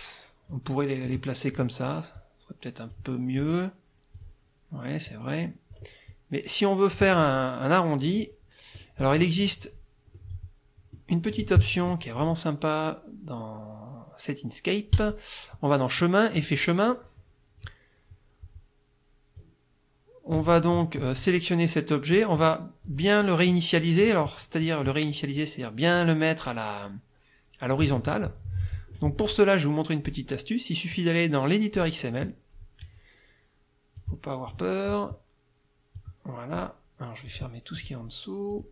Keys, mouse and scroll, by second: 0.5 click, 1.6 click, 2.2 click, 3.4 click, 4.2 click, 5.1 click, 6.1-7.4 drag, 8.2 middle click, 10.2-11.2 middle drag, 15.0 click, 16.4 click, 19.4-20.8 drag, 21.2-22.3 drag, 22.8 click, 26.0-28.0 drag, 30.1 click, 31.8 click, 34.0 click, 36.0 click, 37.3 click, 37.8 click, 38.5 click.